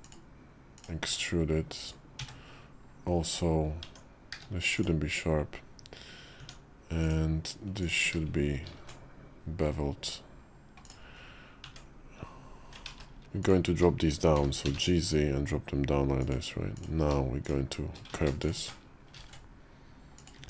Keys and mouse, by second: 0.6 click, 0.9 e, 2.0 a, 3.7 Tab, 4.2 q, 6.2 Tab, 6.9 click, 7.7 shift+click, 8.6 ctrl+shift+b, 10.9 Tab, 11.5 Tab, 12.9 ctrl+z, 13.0 ctrl+z, 13.3 click, 14.2 g, 18.1 ctrl+shift+z, 19.0 ctrl+shift+b, 20.2 Tab.